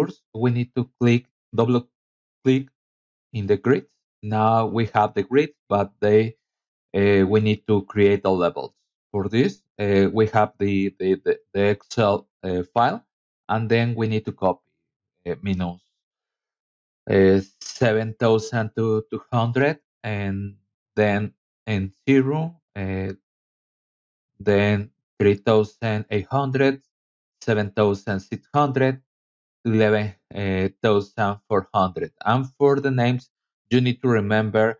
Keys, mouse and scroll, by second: 0.1 scroll up 2, 1.6 click, 1.8 click, 5.0 click, 10.6 KP_Subtract, 11.2 KP_7, 11.6 KP_2, 20.6 KP_3, 21.9 KP_5, 24.5 KP_7, 24.8 KP_3, 27.3 KP_0, 27.7 KP_1, 32.0 click.